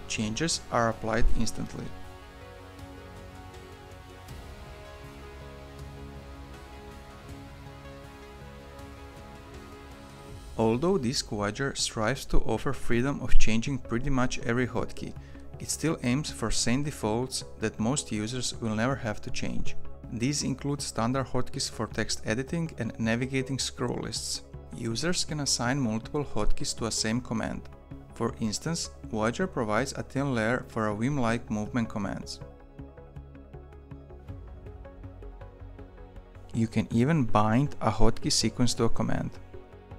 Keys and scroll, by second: 0.6 typing, 0.9 ctrl+s, 29.3 Down, 29.4 Down, 29.6 Down, 30.0 Down, 30.7 Up, 30.9 Down, 39.0 Up, 39.0 c.